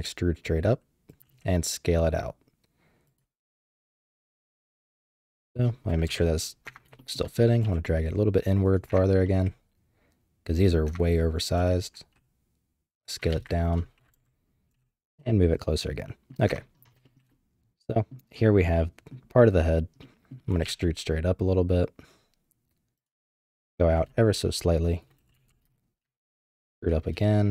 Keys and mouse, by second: 1.1 typing, 4.2 middle click, 4.9 middle click, 6.0 KP_7, 6.6 Tab, 7.0 shift+middle click, 7.6 g, 8.9 Tab, 9.2-10.7 middle drag, 10.9 Tab, 11.5 s, 13.3 ctrl+a, 14.1 KP_7, 14.7 g, 15.8 middle click, 16.5 Tab, 17.0 shift+click, 17.3 click, 18.8 click, 20.0 middle click, 20.5 e, 22.9-23.9 typing, 25.2 e.